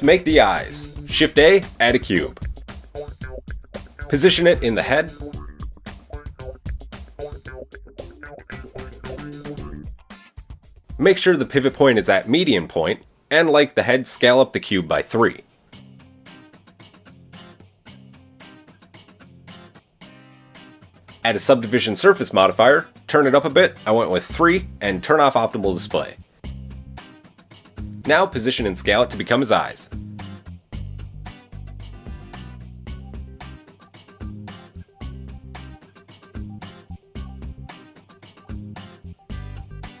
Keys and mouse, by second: 0.6 shift+a, 2.1-5.0 drag, 2.1 shift+a, 3.8 g, 5.0-12.1 shift+middle drag, 8.2 KP_1, 9.3 s, 12.1-21.2 drag, 21.2-21.8 middle drag, 21.8-25.5 drag, 26.5 KP_1, 28.1 g, 32.2-40.0 middle drag, 33.9 KP_1, 35.6 s.